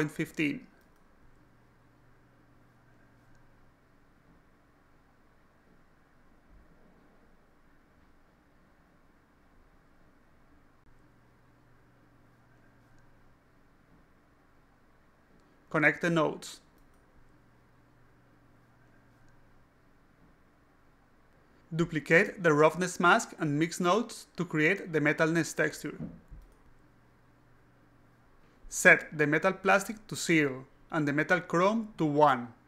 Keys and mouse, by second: 0.1 click, 0.4 click, 0.6 click, 1.2 click, 2.2 click, 2.4-3.4 typing, 4.0 click, 8.3 click, 9.3 click, 12.3 click, 12.8 click, 13.8 click, 13.9-15.4 typing, 16.2 click, 17.6 click, 18.8 click, 19.6 alt+click, 21.3 click, 22.1 shift+click, 23.2 click, 23.3 click, 24.3 click, 24.8-25.8 typing, 26.3 click, 26.9 click, 27.7 click, 28.3 click, 29.2 click, 29.5-30.5 typing, 30.8 click, 31.5 click, 32.3 click.